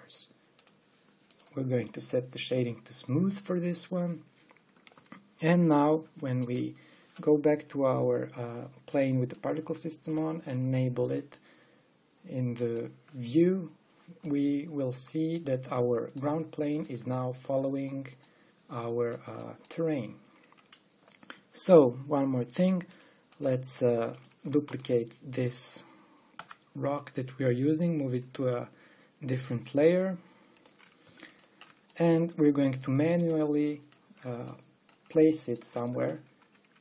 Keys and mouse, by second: 3.6-4.9 drag, 6.1-7.7 drag, 7.7 middle click, 8.7-10.0 middle drag, 12.1 middle click, 12.5 middle click, 12.7 middle click, 23.6-25.9 drag, 24.8-25.8 right drag, 25.3 shift+d, 25.9 right click, 27.0 m, 32.6 middle click, 36.5 click, 36.5 g.